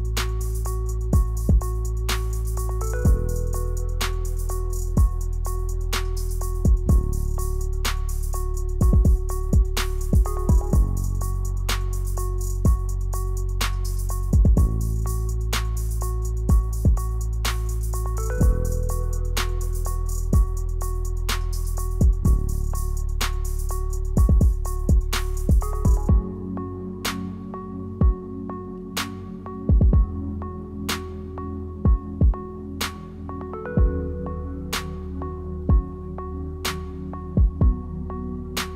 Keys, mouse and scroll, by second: 0.4 s, 2.7 g, 3.9 s, 5.0 scroll down 2, 5.3 shift+middle click, 6.2 middle click, 6.4-7.1 scroll down 6, 6.8 middle click, 7.7 s, 7.9-8.7 scroll up 11, 8.3 shift+middle click, 8.7 shift+middle click, 9.4 e, 10.7 s, 10.9 click, 11.7 g, 13.0 g, 14.2 e, 14.9 r, 16.1 ctrl+z, 16.3 ctrl+z, 16.5 ctrl+z, 17.0 r, 18.1 g, 19.6 g, 20.7-21.3 scroll down 4, 21.3 scroll down 2, 22.7 Tab, 22.7 scroll down 3, 23.0 click, 24.1 click, 24.3 right click, 24.9 click, 25.2 middle click, 26.1 ctrl+z, 26.3 ctrl+z, 26.7 scroll up 4, 26.9 middle click, 27.3 ctrl+s, 27.5-27.9 scroll up 2, 27.7 middle click, 28.2 click, 28.6 click, 28.8 Tab, 29.3 scroll down 4, 29.6 middle click, 30.6 click, 31.3 e, 32.5 s, 35.1 e, 36.5 a, 37.3 ctrl+z, 37.7 s.